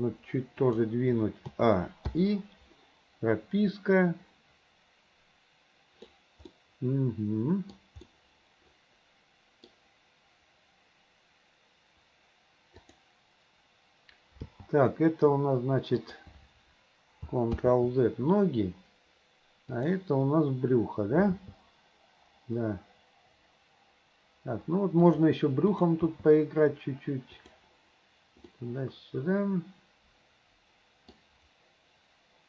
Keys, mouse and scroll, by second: 1.5 a, 2.1 i, 3.8-6.2 drag, 6.5-7.8 middle drag, 8.1-9.7 middle drag, 12.8 click, 14.4 g, 17.6 ctrl+z, 19.8 click, 21.3 g, 26.1 g, 28.5-31.1 middle drag, 31.1-31.6 scroll down 1.